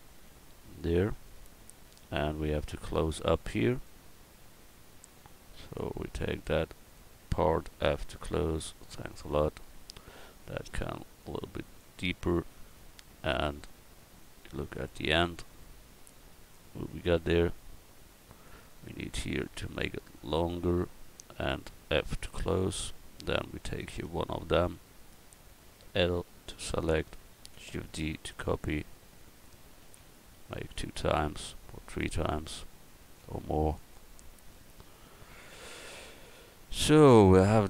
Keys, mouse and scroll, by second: 2.8 Tab, 3.3 Tab, 4.0 Tab, 5.9-7.5 drag, 7.1 right click, 7.8 f, 8.3 middle click, 8.6 Tab, 9.2 middle click, 10.3 right click, 12.0 middle click, 16.9 middle click, 18.9 Tab, 20.2-21.4 middle drag, 22.4 f, 23.2 Tab, 24.0 Tab, 24.8 a, 26.0 l, 27.6 shift+d, 28.8 click, 29.8 shift+d, 30.5-32.6 drag, 33.1 shift+d, 35.7 a.